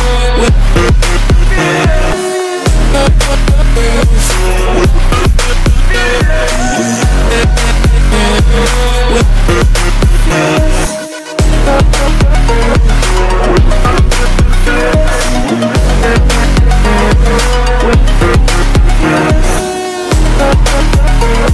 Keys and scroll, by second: 0.2 ctrl+z, 2.1 ctrl+z, 5.0 ctrl+z, 7.0 ctrl+z.